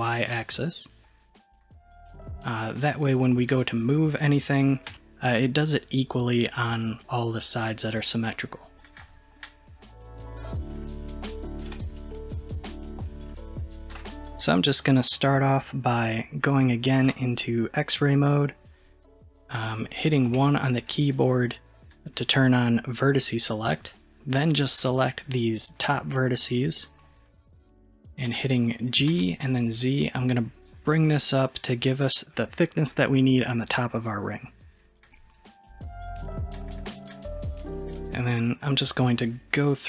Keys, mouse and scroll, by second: 0.6-3.3 middle drag, 3.3 click, 4.9 g, 10.1-10.5 scroll down 1, 10.5-11.5 middle drag, 11.7 KP_1, 13.1 scroll up 2, 13.6-14.1 shift+middle drag, 17.0 alt+z, 20.3 1, 21.9 click, 25.2 click, 28.4 g, 36.5-36.9 scroll up 1, 38.1 drag.